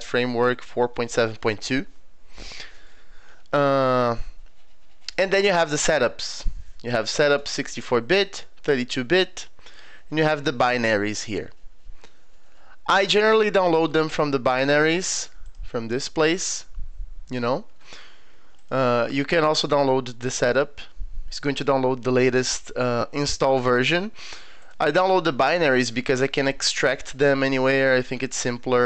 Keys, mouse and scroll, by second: 2.9 scroll down 2, 13.8 middle click, 14.1 middle click, 15.5 click, 18.6 click, 24.6 click.